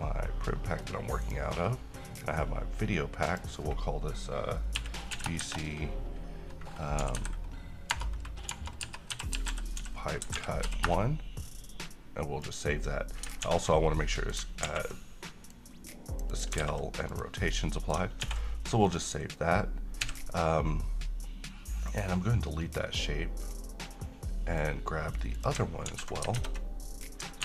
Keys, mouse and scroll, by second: 1.4 click, 4.9-5.5 typing, 7.9-10.7 typing, 11.0 Return, 12.5 click, 13.6 s, 14.1 middle click, 14.1-14.7 middle click, 14.7 a, 15.6-16.8 click, 16.8 ctrl+a, 17.2 click, 17.6-18.2 middle click, 18.4 ctrl+s, 18.9-19.2 scroll down 1, 20.1 x, 22.0 click, 26.0 c, 26.4 alt+Tab.